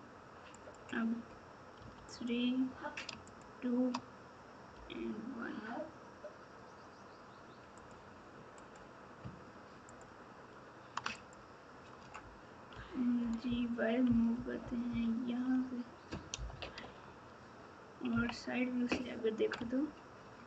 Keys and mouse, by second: 8.5 click, 16.8 Tab, 18.1 KP_3, 19.5 Tab.